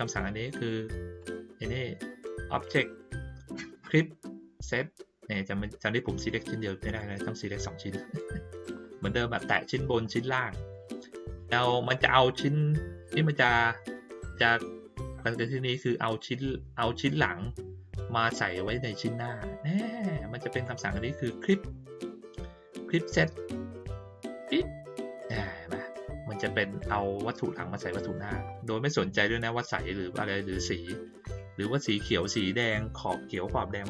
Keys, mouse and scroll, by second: 1.1 click, 6.8 click, 9.3 click, 10.0 shift+click, 20.6 click, 24.3 click.